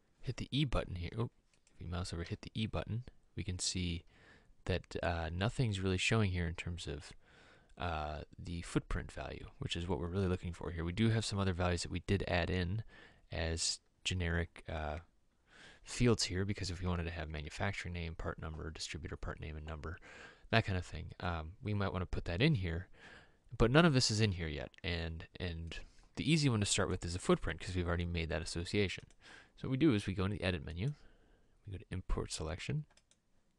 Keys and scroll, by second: 2.4 e.